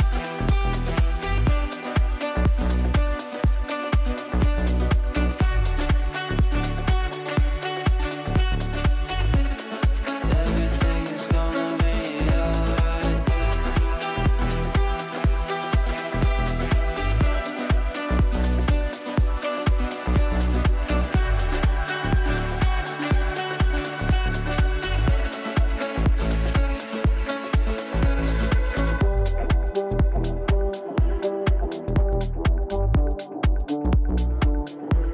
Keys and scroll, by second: 0.2 ctrl+z, 1.0 shift+Page_Down, 4.2 ctrl+z.